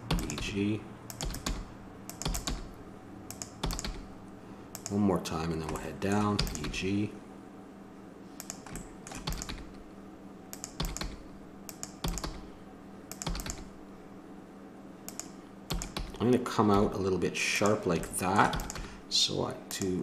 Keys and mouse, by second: 0.0-2.5 typing, 3.6 e, 3.8 g, 5.8 middle click, 6.4 e, 6.8 g, 9.2 e, 9.5 g, 10.8-13.5 typing, 15.7-16.8 drag, 18.5 e, 18.8 g, 19.6 click.